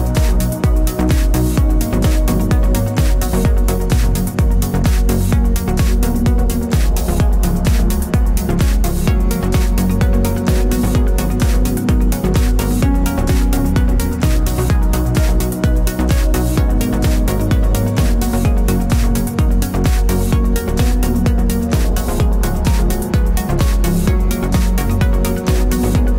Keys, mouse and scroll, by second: 0.2 scroll up 1, 0.5 ctrl+b, 2.3 Tab, 2.6 click, 2.8 Tab, 3.3 alt+click, 3.7 ctrl+b, 6.7 Tab, 7.0 scroll down 1, 7.6-8.6 shift+middle drag, 8.6 click, 10.2 alt+d, 11.3 click, 13.5-18.0 drag, 13.5 r, 15.0 KP_Enter, 15.5 g, 18.5 g, 19.2 click, 20.7 alt+d, 24.5-24.8 scroll down 1, 25.0-26.1 shift+middle drag, 25.7 alt+d.